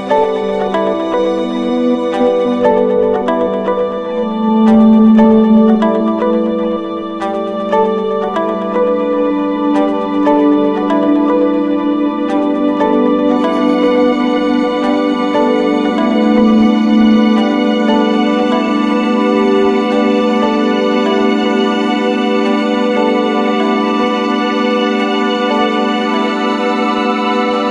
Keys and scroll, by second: 13.0 ctrl+-.